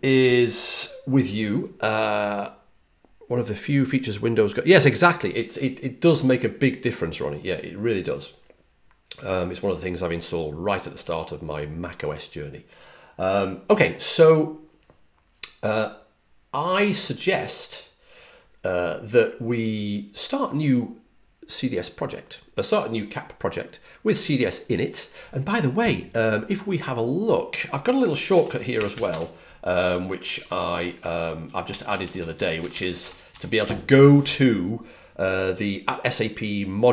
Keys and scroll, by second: 28.4-29.3 typing, 30.6-33.7 typing.